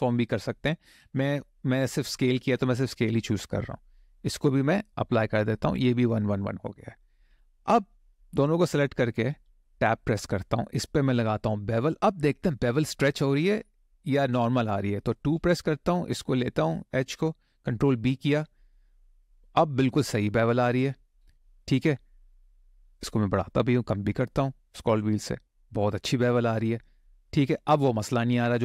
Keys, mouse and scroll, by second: 7.9 shift+click, 9.0 Tab, 11.1 shift+middle click, 11.6 middle click, 13.1 click, 15.1 2, 15.9 click, 17.7 ctrl+b, 20.0-21.0 scroll down 7, 21.6-22.4 scroll down 3, 22.4-23.3 scroll up 5, 23.5 scroll down 1, 23.6-24.2 scroll down 3, 24.2-25.2 scroll up 6, 25.9 click, 26.4 middle click.